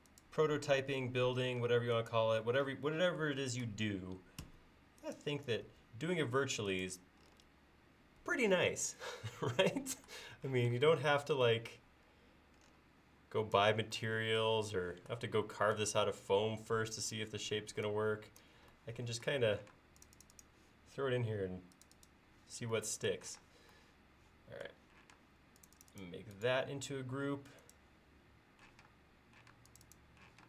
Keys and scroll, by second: 1.7 space, 4.5 BackSpace, 5.7 BackSpace, 10.6 p, 17.4 Escape, 19.8 space, 23.5 space, 25.2 space, 28.8 p.